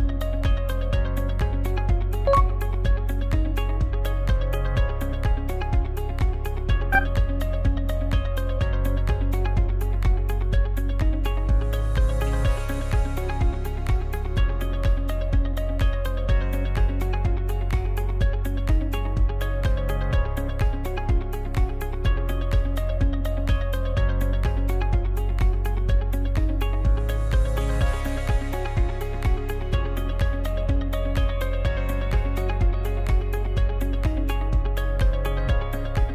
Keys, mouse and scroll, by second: 1.0 Tab, 1.5 right click, 12.2 shift+click, 13.0 right click, 15.1 click, 15.7 right click, 16.9 click, 17.5 right click, 18.3 click, 19.2 Tab, 19.7 scroll down 4, 20.8-24.9 drag, 24.9 right click, 25.6 s, 29.3-29.8 scroll up 4, 31.1-34.2 scroll up 1.